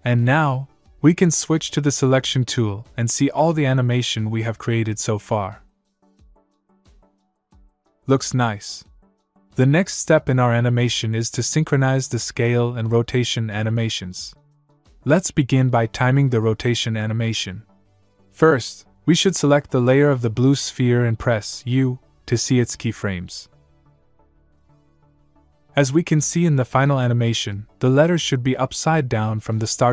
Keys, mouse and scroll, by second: 2.2 v, 3.1 click, 5.0 space, 9.1 space, 10.0 click, 21.0 click, 24.8 u, 25.9 click.